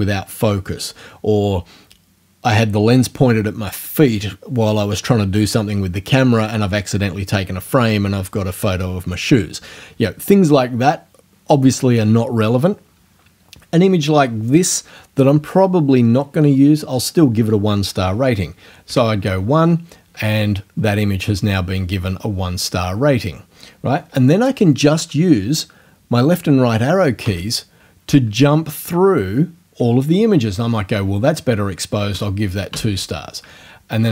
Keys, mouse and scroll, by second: 18.9 1, 27.2 Right, 32.1 2, 32.7 Right.